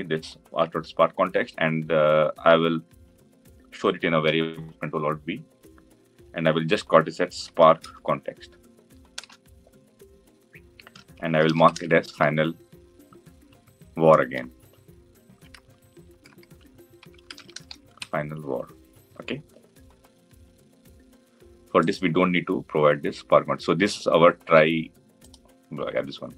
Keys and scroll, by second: 4.2 ctrl+alt+v.